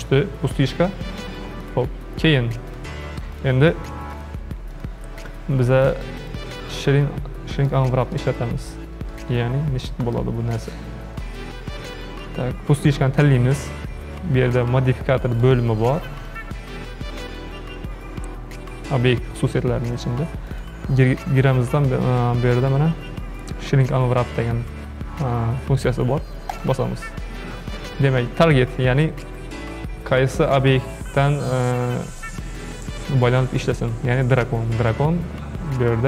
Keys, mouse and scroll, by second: 1.6 click, 2.7 click, 3.3 click, 4.2 click, 4.7 click, 5.2 click, 5.9 click, 6.2 click, 7.0 scroll down 2, 7.7-13.2 shift+middle drag, 15.3 click, 16.3 click, 20.5-23.6 drag, 32.2-35.3 drag.